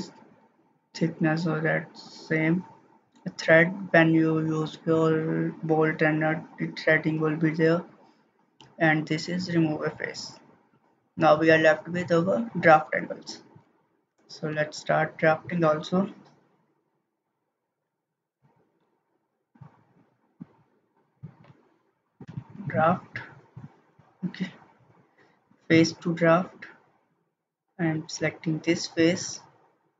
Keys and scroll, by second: 14.0 ctrl+z, 14.5 ctrl+z.